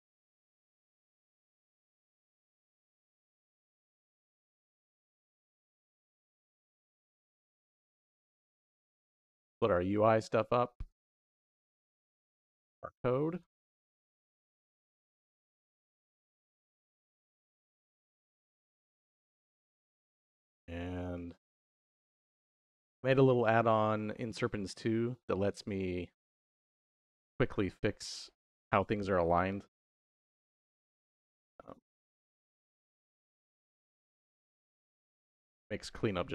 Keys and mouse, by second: 4.9 shift+middle click, 6.6-7.4 drag, 8.0 middle click, 8.7 g, 9.4 click, 9.8-10.8 drag, 11.1 shift+click, 11.9 g, 13.6 click, 14.0 click, 15.3 g, 17.0 click, 17.5 click, 18.5 g, 19.8 click, 21.1-21.4 drag, 23.4 middle click, 24.6 middle click, 25.7 middle click, 29.6 ctrl+KP_5, 31.0 ctrl+KP_4, 32.3 Right, 32.6 Right, 32.8 Right, 32.9 Right, 33.0 Right, 33.2 Right, 34.7-35.1 drag, 36.1 ctrl+KP_4.